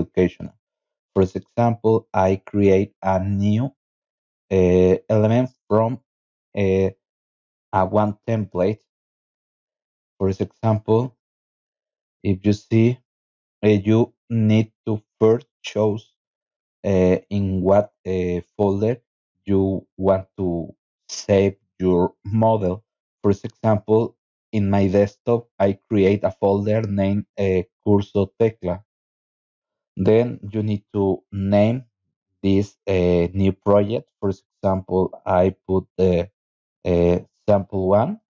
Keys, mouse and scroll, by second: 6.0 click, 9.2 click, 12.3-13.4 scroll up 3, 13.9 click, 15.0-16.1 scroll down 5, 20.1 click, 27.2 click, 27.7 click, 28.5 click, 32.2-34.8 typing, 35.7 click.